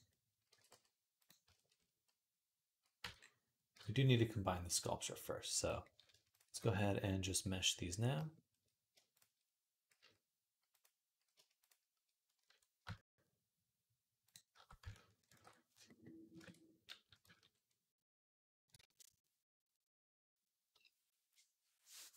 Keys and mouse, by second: 0.3 g, 2.8 Tab, 3.5 Tab, 4.4 click, 5.4 click, 6.1 shift+click, 6.1 shift+middle click, 8.9 shift+click, 9.7 q, 14.0 shift+click, 15.2 ctrl+j, 16.1 ctrl+Tab.